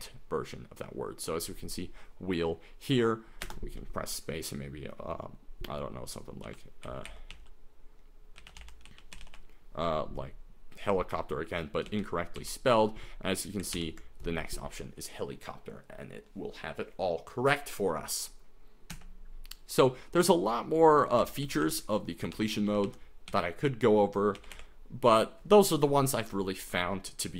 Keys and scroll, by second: 3.6 space, 6.2-9.7 typing, 11.9 ctrl+x, 12.4 s, 13.8 ctrl+n, 19.0 Escape, 21.2-24.5 typing.